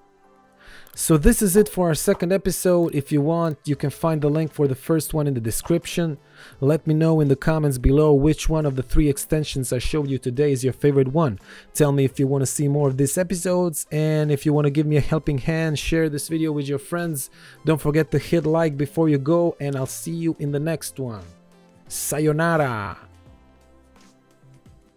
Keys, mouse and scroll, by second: 0.9 right click, 1.5 click, 3.9 ctrl+1, 4.1 click, 8.1 KP_2, 8.2 KP_0, 8.3 Return, 9.2 ctrl+1, 16.4 click, 19.6 Return.